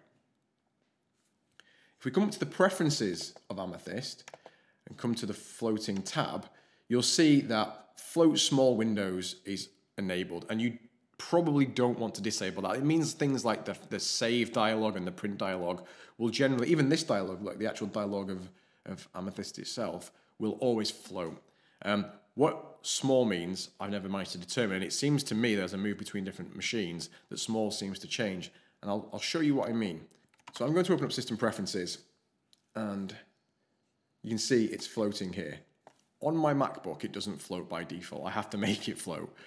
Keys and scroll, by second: 30.4 super+space, 30.5-31.5 typing.